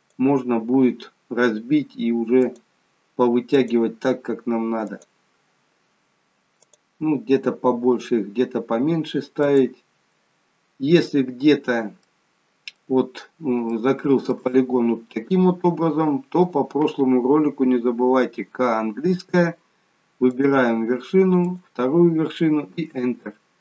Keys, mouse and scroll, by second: 0.1 click, 3.6 click, 5.0 click, 9.5 click, 11.1 click, 11.7-12.1 scroll up 1, 12.1 middle click, 13.8 shift+middle click, 16.5 click, 18.3 k.